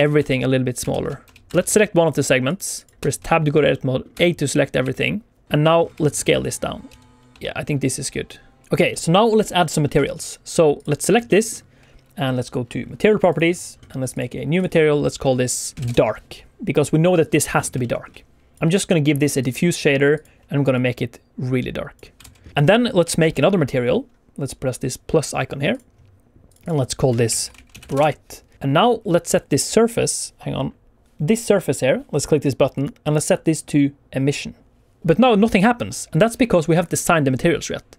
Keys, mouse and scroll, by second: 0.1 Tab, 0.9 alt+shift+z, 1.2 Tab, 1.5 Tab, 1.5 alt+a, 1.5 alt+scroll down 2, 2.4 click, 2.7 click, 2.9 Tab, 2.9 scroll up 2, 3.2 shift+middle click, 3.6 middle click, 4.1 a, 4.4 middle click, 4.5 click, 4.5-4.8 scroll down 2, 4.8 middle click, 5.6 scroll down 2, 5.9 shift+middle click, 6.1 middle click, 6.8 s, 7.7 Tab, 7.7 click, 8.6 alt+a, 8.6 middle click, 8.6 scroll up 1, 8.8 middle click, 9.8-10.7 scroll down 2, 10.7 click, 10.9 scroll up 2, 11.2 shift+middle click, 11.3 shift+middle click, 13.2 click, 14.0 click, 14.5 click, 17.7 shift+middle click, 18.5 click, 20.0 click, 22.1 alt+a, 22.3 scroll down 1, 23.1 alt+shift+z, 28.5 ctrl+z, 32.6 click.